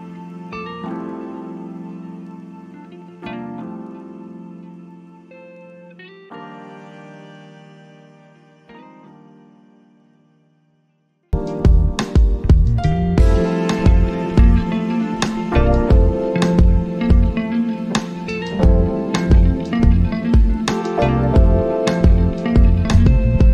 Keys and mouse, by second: 5.4-8.5 drag, 8.5-16.3 drag, 20.8 click, 20.9 click.